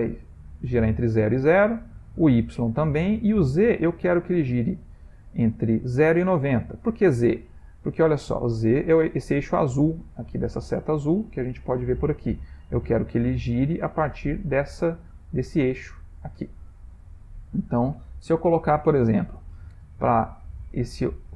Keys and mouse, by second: 2.1 click, 3.5 click, 7.6 middle click, 8.4 middle click, 8.5 middle click, 8.8 middle click, 10.4 shift+middle click, 17.6 click.